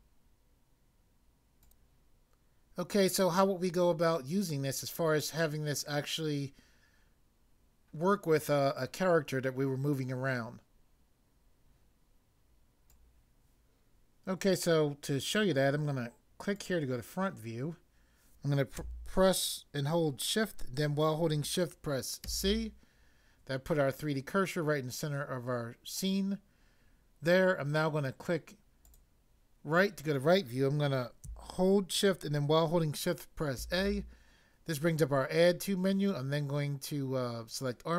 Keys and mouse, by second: 1.6 click, 1.7 click, 12.9 click, 16.5 click, 22.2 c, 28.9 click, 33.6 a.